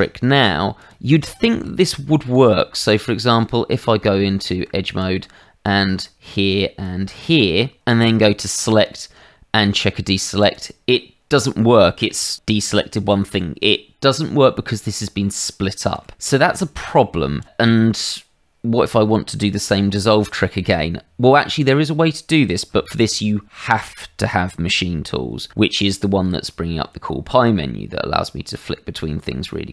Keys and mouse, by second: 0.8 click, 1.4 shift+middle click, 1.8 Tab, 2.8 shift+z, 3.7 Tab, 5.0 click, 6.3 shift+click, 8.4 click, 10.4 click, 12.0 middle click, 12.7 middle click, 14.7 middle click, 15.9 shift+z, 17.4 shift+click, 17.7 middle click, 18.8 middle click, 26.2 Tab.